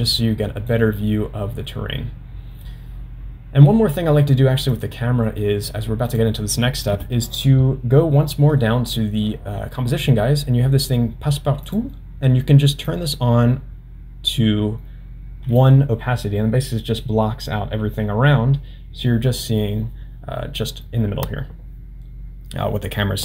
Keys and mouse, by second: 4.7 click, 6.1 click, 11.7 click, 13.0-15.6 drag.